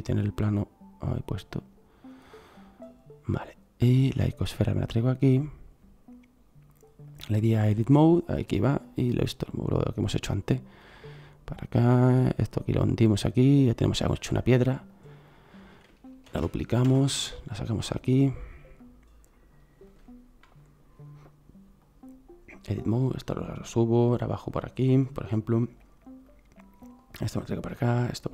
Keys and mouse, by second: 0.4-2.1 drag, 4.2-5.2 right drag, 5.2-7.1 middle drag, 8.3 right click, 9.4 middle click, 16.3 shift+d.